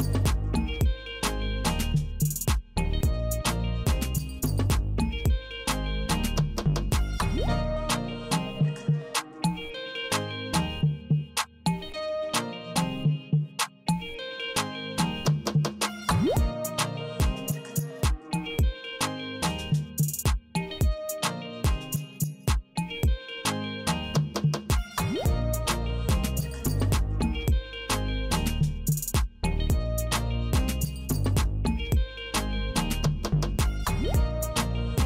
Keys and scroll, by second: 0.8 Right, 2.7 s, 4.6 Delete, 6.4 space, 8.3 Left, 9.7 Left, 11.0 Left, 12.0 Left, 13.7 Left, 15.0 Left, 16.9 Up, 18.7 Right, 20.5 w, 21.6 w, 22.8 w, 23.9 w, 25.1 Right, 27.0 c, 28.1 Right, 30.0 p, 31.9 p, 33.7 Right.